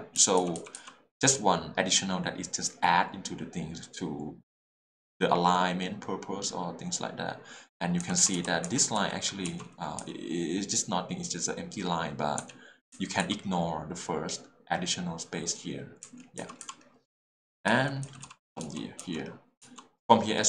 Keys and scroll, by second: 0.2 h, 8.0-10.0 typing, 12.4 j, 12.9 k, 13.2 j, 16.0 k, 16.4 j, 17.7 l, 18.6 h.